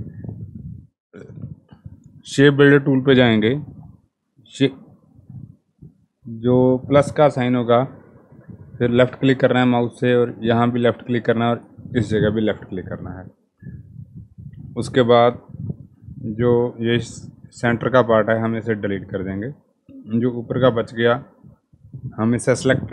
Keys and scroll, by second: 18.3 Delete.